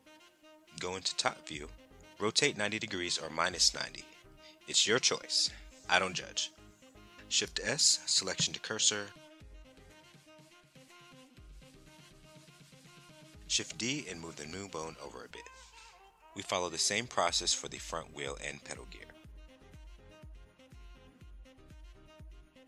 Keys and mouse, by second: 0.2 KP_9, 0.4 KP_0, 0.9 KP_Enter, 3.7 alt+r, 7.8 shift+s, 11.8 middle click, 13.9 shift+d, 14.2 click, 15.4-16.4 drag, 17.7 Tab, 18.1 click, 19.6 shift+s, 21.8 click.